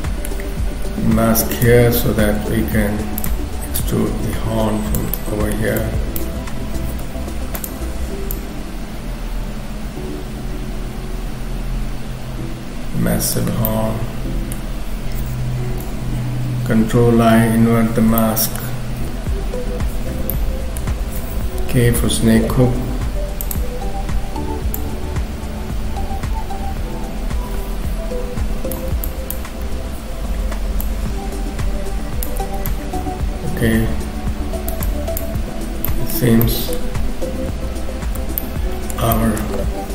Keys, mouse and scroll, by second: 0.7 f, 2.7 f, 3.8 click, 5.1 middle click, 5.8 click, 6.7 shift+f, 8.3 click, 13.5-14.0 scroll down 3, 13.7 middle click, 17.1 ctrl+i, 18.2 shift+middle click, 19.1 KP_3, 20.3 shift+middle click, 21.6 k, 22.5 f.